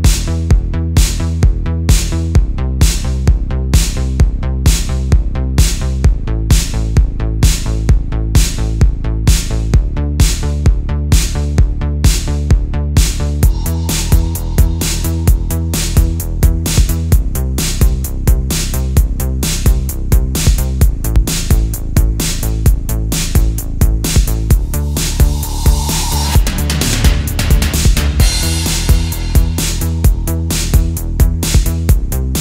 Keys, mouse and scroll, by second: 1.1 e, 3.2 click, 3.6 middle click, 7.6 click, 8.1 click, 8.4 click, 9.4 Tab, 10.4 middle click, 11.3 click, 11.8-12.5 middle drag, 13.1 Tab, 15.6 ctrl+z, 16.0 ctrl+z, 18.9 Tab, 19.8 g, 21.2 right click, 21.7 Tab, 22.2 middle click, 22.9 a, 24.4 e, 32.3 right click.